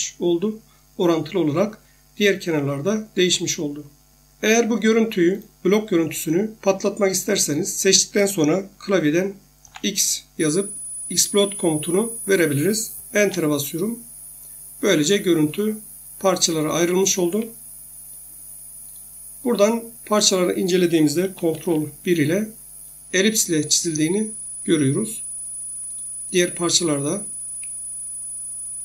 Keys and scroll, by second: 3.2 Escape, 9.6 x, 13.2 Return, 17.3 Escape, 21.5 ctrl+1, 24.6 Escape, 27.4 Escape.